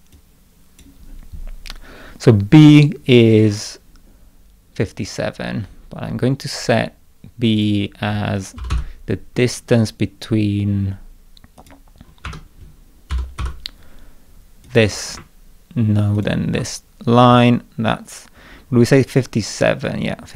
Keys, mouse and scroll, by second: 0.1-0.8 drag, 3.3 scroll down 1, 5.0 middle click, 7.6 click, 8.4-9.2 typing, 11.6 click, 12.3 Escape, 13.1 k, 13.4 d, 14.7 click, 16.2 ctrl+click, 19.1 scroll down 2, 19.9 scroll up 2.